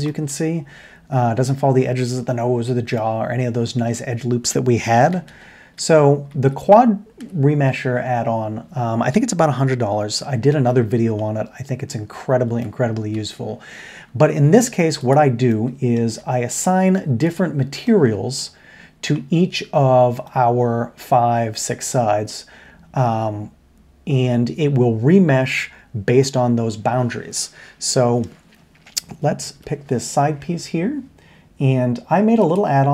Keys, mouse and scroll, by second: 0.0 middle drag, 2.9-3.6 middle drag, 5.1 ctrl+z, 5.8 ctrl+z, 6.3 ctrl+z, 11.2-11.9 middle drag, 12.6-12.9 shift+middle drag, 15.0 middle click, 15.5-15.9 middle drag, 16.0 Tab, 18.5 middle drag, 19.7-20.2 middle drag, 29.5 l.